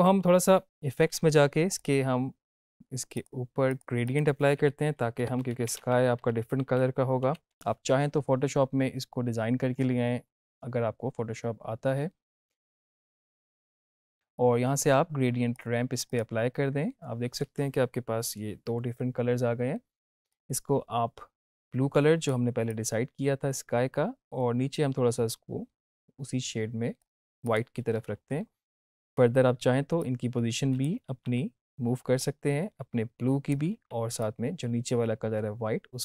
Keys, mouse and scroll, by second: 4.8-7.4 typing, 12.7-13.2 scroll down 1, 13.7 click, 15.5-16.3 click, 20.2-22.4 drag, 30.3-30.9 click, 31.0 z, 32.2-33.7 drag, 33.7 ctrl+z, 34.1-36.0 drag.